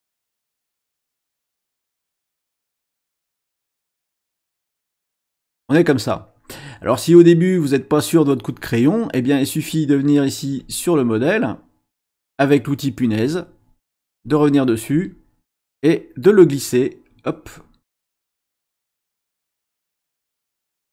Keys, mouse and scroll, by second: 0.0 click, 2.0 click, 2.8 click, 10.6 click, 13.0 click, 14.2 click, 14.9-16.5 drag, 17.0 click, 18.4 click, 20.2 click.